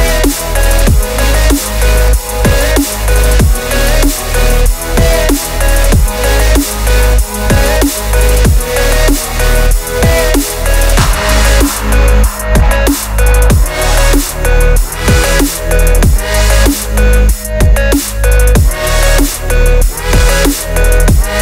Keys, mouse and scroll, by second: 0.2 Tab, 1.1 click, 1.5 Tab, 1.6 a, 1.7 s, 2.5 s, 3.8 g, 5.4 s, 5.9 g, 7.1-8.7 scroll down 2, 7.2 shift+middle click, 8.7-10.9 drag, 12.5-12.9 scroll up 1, 12.9 2, 13.0 click, 13.3 ctrl+b, 15.6 ctrl+r, 16.8 Tab, 18.6 ctrl+2, 19.8 ctrl+c, 20.2 ctrl+v, 20.4 Tab, 20.6-21.4 typing, 20.8 click.